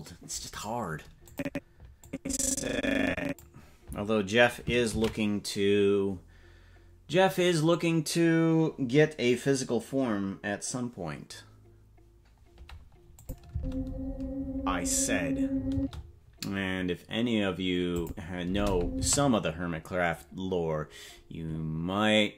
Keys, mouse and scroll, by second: 1.3 click, 2.0-3.4 drag, 7.5 ctrl+s, 13.2 click, 13.5 space, 15.7 space, 18.0 click, 18.4 space, 19.0 space.